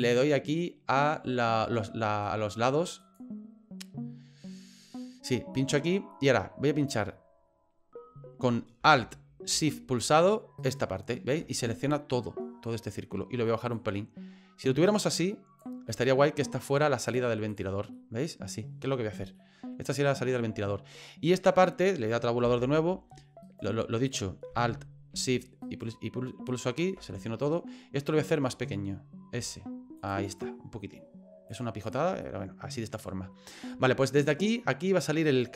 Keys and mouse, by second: 3.0 click, 10.6 alt+shift+right click, 13.7-15.6 drag, 15.9 right click, 17.1 click, 17.9 middle click, 19.4 middle click, 22.4 Tab, 23.4 right click, 25.6 alt+shift+right click, 26.5 alt+shift+right click, 28.5 middle click, 29.4 s, 30.3 right click, 31.6 click, 32.2 middle click, 35.3 right click.